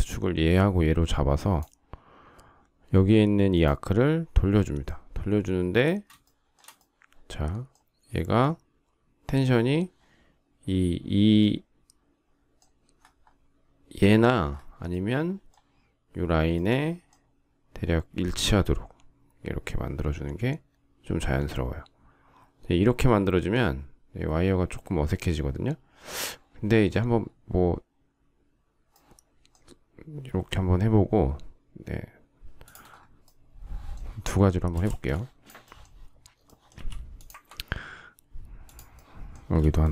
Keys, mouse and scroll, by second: 5.9 shift+middle click, 34.5 space, 36.4 m.